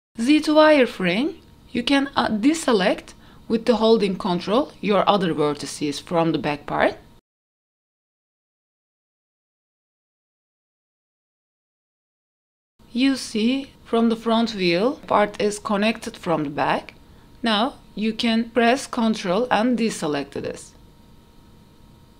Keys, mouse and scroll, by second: 0.1 KP_3, 2.0 click, 4.2 Tab, 6.1 ctrl+click, 7.8 ctrl+click, 8.9 ctrl+click, 10.3 p, 10.7 Tab, 10.9 click, 11.7 click, 12.4 click, 13.6 shift+middle drag, 16.0-16.4 drag, 16.9 click, 17.7 click, 19.6 Tab, 20.6 ctrl+click, 21.8 p.